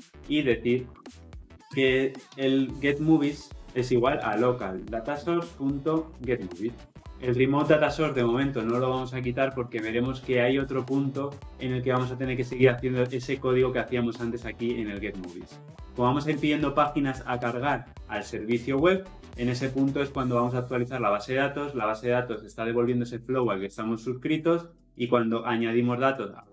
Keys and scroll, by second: 4.9 Return.